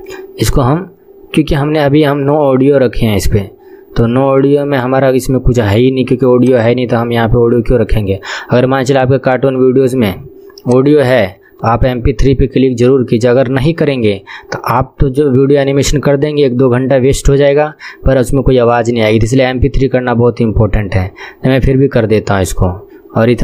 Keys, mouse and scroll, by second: 9.6-9.9 scroll down 1, 10.7-22.4 drag, 22.4 scroll down 2.